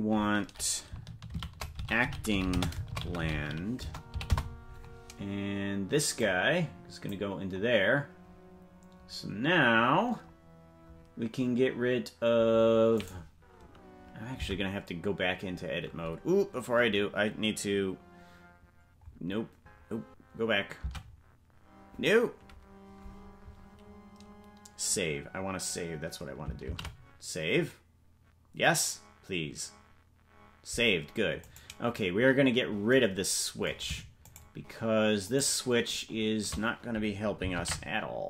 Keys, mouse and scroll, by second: 32.9 right click, 34.9-38.1 shift+right drag.